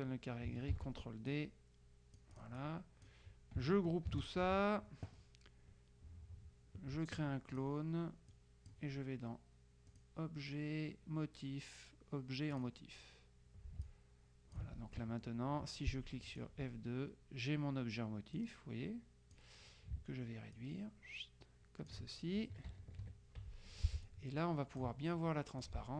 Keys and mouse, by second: 0.8 ctrl+d, 1.4-3.0 ctrl+drag, 4.2 ctrl+g, 7.6 click, 8.4 click, 10.0 click, 12.6 click, 14.0-15.2 ctrl+drag, 16.4 click, 18.4-20.0 drag, 20.6-22.5 ctrl+drag, 22.8 KP_Subtract, 24.2 F1, 24.2 click, 25.7 click.